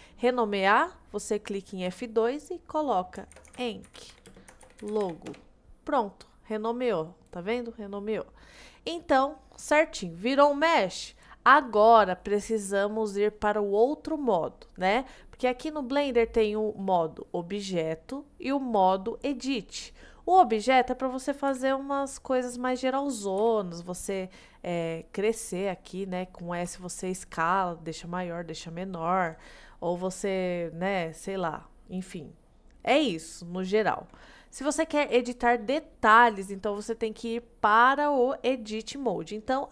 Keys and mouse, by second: 1.9 F2, 8.6 click, 21.6 g, 23.5 s, 26.7 s, 29.3-29.8 right drag, 30.9-31.3 middle drag.